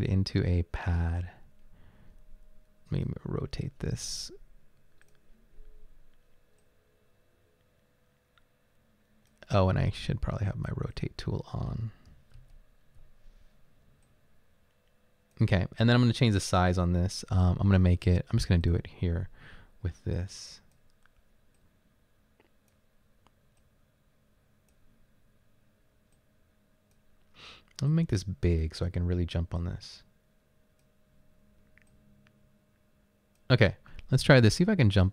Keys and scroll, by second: 12.4 ctrl+z.